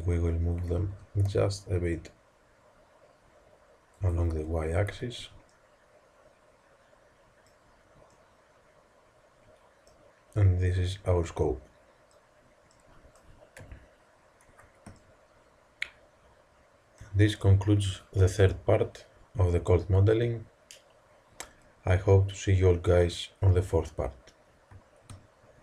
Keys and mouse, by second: 0.6 s, 4.9 z, 5.2 Tab, 13.5 KP_1.